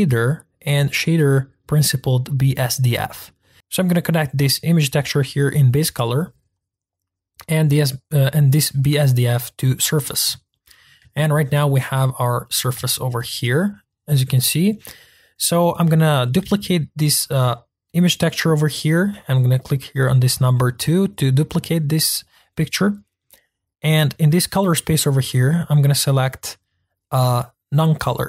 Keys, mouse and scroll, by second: 5.7 click, 7.9-9.8 drag, 10.5-11.4 middle drag, 11.4-11.7 scroll up 2, 11.7-12.4 middle drag, 12.7-15.7 shift+middle drag, 15.7-16.4 drag, 16.4 shift+d, 20.8-28.2 drag.